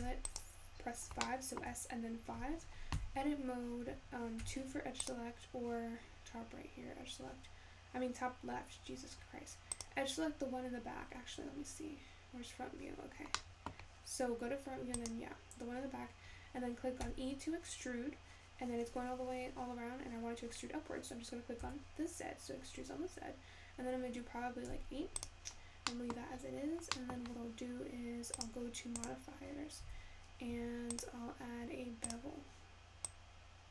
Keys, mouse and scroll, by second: 1.6-6.5 shift+middle drag, 6.5 click, 13.7-16.1 middle drag, 16.1 click, 19.5 e.